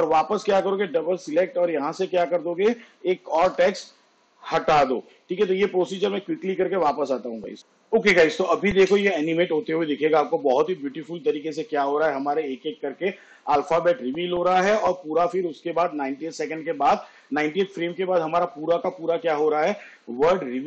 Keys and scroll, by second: 3.5 BackSpace, 8.9 space.